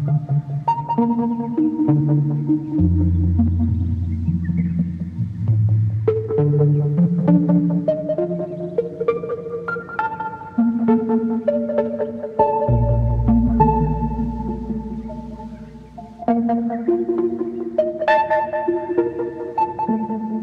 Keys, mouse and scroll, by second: 6.7 right click, 7.4 scroll down 4, 7.6 right click, 7.7 click, 7.9-8.4 scroll up 5, 8.7 scroll down 3, 9.7 scroll down 3, 10.2-12.2 shift+middle drag, 13.5 scroll down 4, 14.5 Tab, 16.5 s.